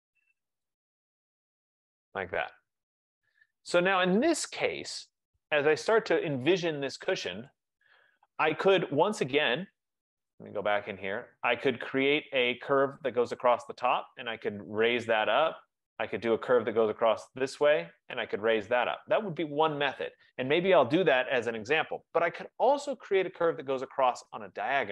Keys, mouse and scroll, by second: 0.7 click, 2.1 click, 3.2 click, 7.3 click, 7.9 click, 10.5 click, 10.7 click, 11.9 middle click, 12.1 middle click, 24.7 middle click, 24.8 middle click.